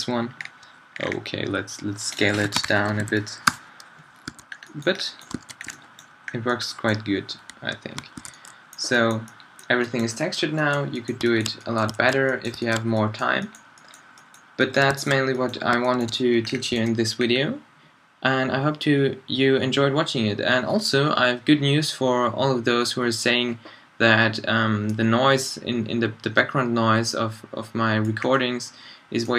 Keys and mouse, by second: 0.0-4.1 drag, 4.3 a, 4.8 middle drag, 5.4 alt+a, 8.2 alt+a, 8.5 middle drag, 8.7 middle drag, 11.5-12.3 middle drag, 12.7-14.4 middle drag, 18.9-27.2 middle drag, 28.3 middle click.